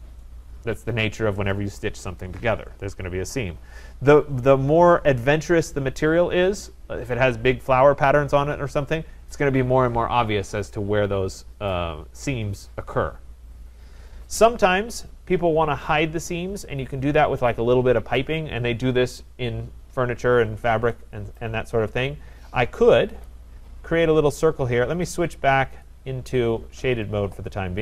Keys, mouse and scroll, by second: 23.6 click, 25.9 click, 26.8 click.